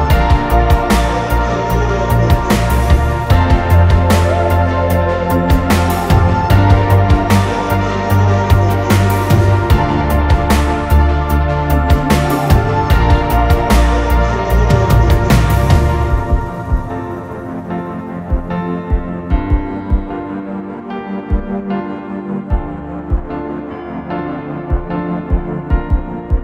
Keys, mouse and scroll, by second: 0.0 scroll down 1, 1.8 typing, 2.5 Return, 2.8-3.8 typing, 2.9 Return, 3.9 Return, 5.3 double click, 5.5 scroll up 1, 5.8 middle click, 6.7 typing, 7.6 scroll down 1, 8.3 typing, 8.3 middle click, 8.8 scroll down 1, 8.9 middle click, 9.3-9.8 scroll up 1, 9.8 double click, 10.9 scroll up 1, 11.0 middle click, 11.8 typing, 11.9 scroll up 1, 12.1 scroll down 1, 12.6-13.0 scroll up 1, 14.1 double click, 15.4 scroll down 1, 15.6 space, 16.0 p, 16.2-17.3 scroll down 1, 17.3 p, 17.7 middle click, 18.4-19.0 scroll down 2, 18.6 middle click, 19.1 middle click, 19.4 scroll up 1, 19.6 middle click, 20.3 scroll down 1, 21.8 scroll down 1, 22.2 scroll up 1, 22.5 scroll down 1, 23.7 scroll, 23.9 scroll up 1.